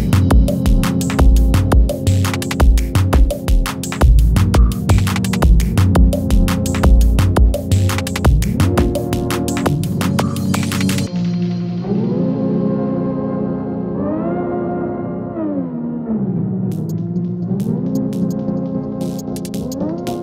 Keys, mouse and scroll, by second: 6.1 click, 7.5 shift+click, 9.0 click, 15.5 Return, 16.4-20.2 drag.